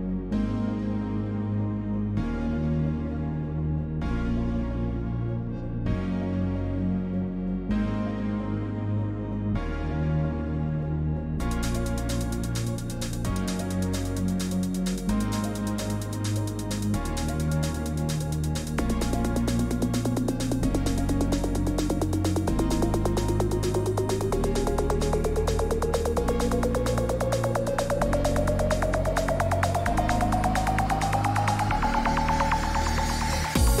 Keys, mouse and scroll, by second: 0.0-1.6 typing, 1.8 right click, 2.9 click, 3.0 ф, 3.9 middle click, 3.9 й, 5.5 click, 6.7 click, 6.9 ф, 8.8 click, 11.2 click, 12.5 click, 13.3 click, 15.1 click, 15.2 click, 15.3-16.5 typing, 15.7 scroll down 5, 16.4 click, 17.8 click, 18.6 click, 19.1 click, 20.1 click, 20.9 scroll up 5, 21.1 right click, 22.3 click, 23.3 click, 23.9 click, 24.5 click, 25.0 click, 25.5 click, 25.8 click, 26.2 click, 27.3-30.4 typing, 27.4 click, 29.0 click, 31.5 click, 32.9 click, 33.3 click, 33.3-33.8 scroll down 32.